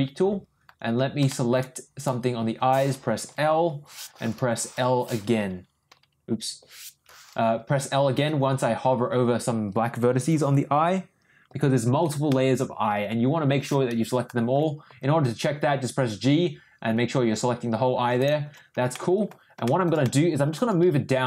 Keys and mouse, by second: 1.3 shift+middle click, 2.0 click, 3.3 l, 5.9 ;, 11.5 l, 11.8 l, 12.0 l, 12.3 middle click, 14.9 g, 18.9 ctrl+middle click, 19.6 ctrl+shift+middle click, 20.0 ctrl+middle click, 20.7 ctrl+g.